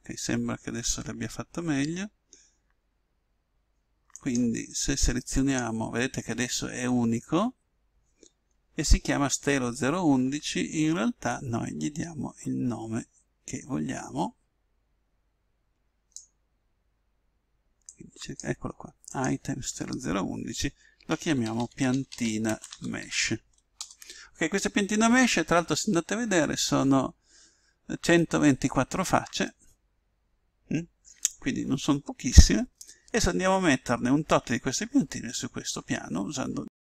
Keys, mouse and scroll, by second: 4.1-7.2 right drag, 11.3 click, 17.8-20.9 drag, 29.4-31.3 middle drag, 36.2 middle click.